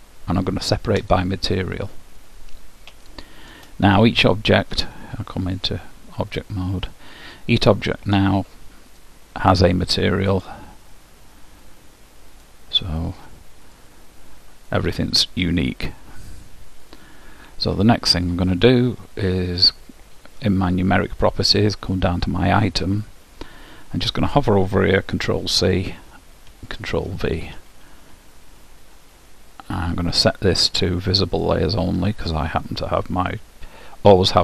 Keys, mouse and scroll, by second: 3.2-4.9 middle drag, 6.4-7.5 drag, 7.0-8.8 middle drag, 9.1-12.4 drag, 12.5-16.9 drag, 16.3-21.7 middle drag, 25.5 ctrl+c, 26.7 ctrl+v, 27.1 ctrl+v, 30.3-32.1 drag.